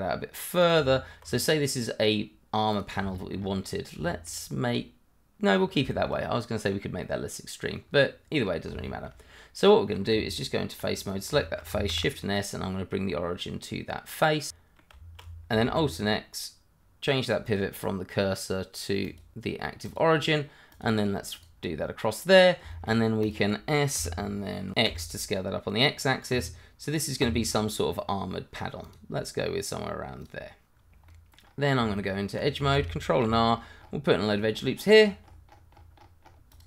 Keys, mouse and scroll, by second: 0.6 click, 0.7 Tab, 1.3 scroll down 1, 1.6 middle click, 2.7 click, 3.1 shift+middle click, 3.2 middle click, 3.4 shift+scroll up 2, 4.0 shift+middle click, 4.1 middle click, 4.2 shift+middle click, 5.6 scroll down 1, 5.9 shift+middle click, 7.0 middle click, 7.9-8.4 scroll up 1, 8.8 shift+middle click, 8.9 middle click, 9.0 shift+middle click, 9.8 middle click, 10.1 Tab, 11.0 click, 11.4 shift+middle click, 11.5 middle click, 11.9 shift+s, 14.5 middle click, 14.9 Tab, 15.6 alt+x, 16.8 scroll down 1, 17.4 click, 19.1 double click, 20.1 click, 21.5-21.8 scroll down 1, 21.8 middle click, 22.9 scroll up 1, 23.2 click, 23.9 s, 24.8 x, 27.7 click, 29.5 scroll down 1, 30.2 click, 30.7-31.1 scroll down 2, 31.1 middle click, 31.4 scroll up 1, 31.8 Tab, 33.2 ctrl+r, 33.5-34.3 scroll up 1, 36.5 click.